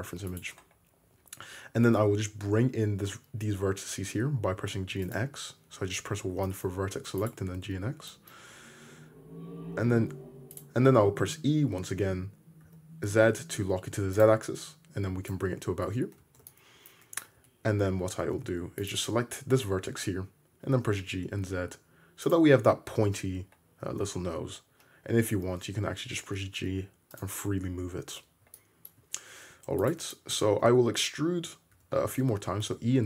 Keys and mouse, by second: 0.3 click, 1.8 g, 2.8-5.2 shift+drag, 6.4 shift+middle click, 7.0 2, 7.3-14.0 middle drag, 9.8 r, 11.0 e, 14.0 shift+click, 15.4 Tab, 16.2 alt+z, 17.4 `, 17.9 Tab, 18.4 1, 18.8 click, 19.4-24.1 drag, 20.6 g, 22.5 Tab, 23.8 Tab, 24.1-25.6 middle drag, 25.1 g, 25.6 shift+click, 25.7-29.9 shift+middle drag, 29.6 2, 29.9-33.0 shift+drag, 31.8 e.